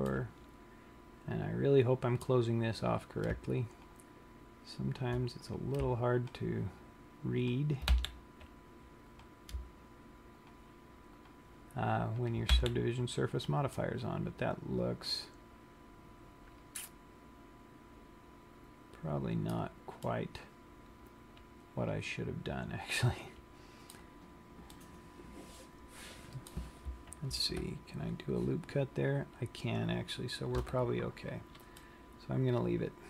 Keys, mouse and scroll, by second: 0.4 middle click, 3.2 click, 4.0 shift+click, 5.6 click, 6.6 shift+click, 7.8 click, 8.2 f, 9.4 click, 10.7 shift+click, 11.4 click, 12.8 f, 13.5 scroll down 1, 14.1 middle click, 20.4 middle click, 25.0 middle click, 27.7 ctrl+r, 32.1 middle click.